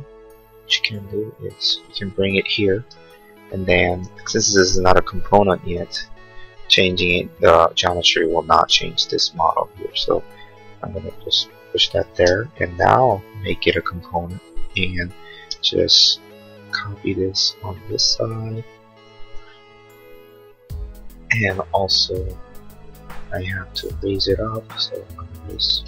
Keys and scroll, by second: 2.8 space, 5.8 p, 12.1 space, 12.4 Escape, 23.9 space.